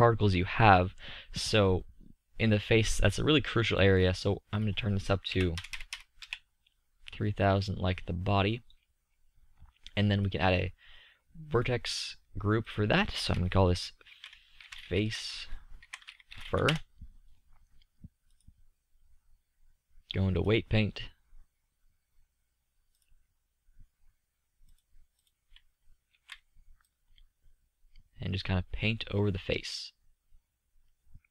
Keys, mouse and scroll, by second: 4.3-5.5 middle drag, 5.5 KP_0, 10.0 middle click, 23.4-24.5 middle drag, 26.0 z, 28.5-29.0 middle drag.